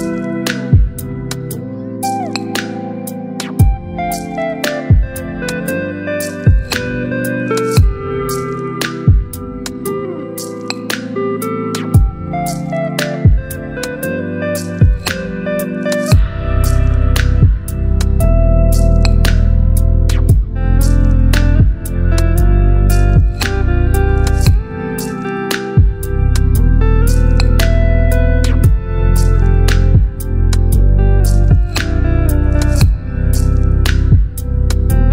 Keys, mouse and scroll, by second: 4.3 ctrl+c, 5.4 click, 6.8 ctrl+v, 8.4-12.8 drag, 13.5 ctrl+t, 15.3-17.0 drag, 20.7-24.5 alt+drag, 24.8-27.6 alt+shift+drag, 31.4 right click, 32.3 click, 34.9 click.